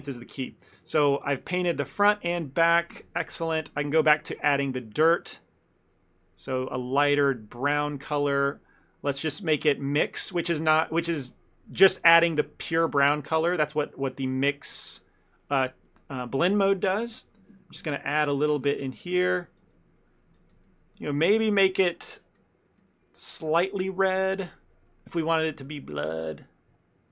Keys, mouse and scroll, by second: 0.8 ctrl+middle click, 0.9 ctrl+middle click, 1.4 middle click, 1.8 middle click, 2.1 ctrl+middle click, 3.0 KP_1, 4.0 ctrl+middle click, 4.1 ctrl+middle click, 5.1 click, 10.0 middle click, 10.8 middle click, 14.0 middle click, 15.0 middle click, 15.5 click, 17.3 f, 17.7 ctrl+middle click, 18.2 click, 18.5 click, 18.7 click, 19.5 click, 20.0 click, 20.2 click, 20.7 click, 20.7 click, 20.9 click, 21.0 click, 21.2 click, 21.5 click, 21.7 click, 21.8 click, 22.0 click, 22.5 click, 22.9 click, 25.0 middle click, 25.7 click.